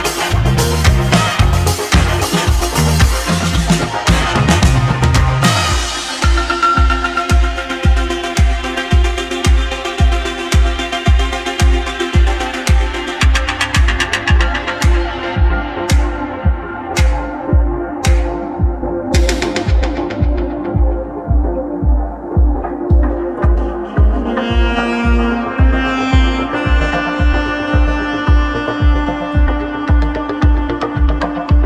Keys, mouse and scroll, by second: 0.2 `, 1.5-2.5 scroll up 1, 2.5 ctrl+r, 11.7 ctrl+b, 26.6 ctrl+r.